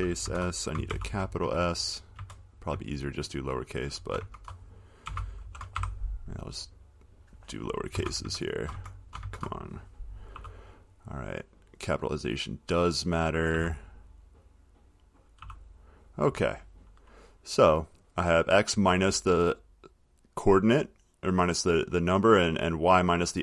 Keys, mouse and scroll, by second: 0.4 Left, 1.1-6.4 typing, 7.2-8.2 drag, 8.1 Left, 8.4 Left, 8.9 Left, 9.4 Left, 10.5 s, 12.1 click, 12.5 click, 13.7 s, 15.3 click, 15.6 s, 16.2 click, 18.9 click, 23.1 click.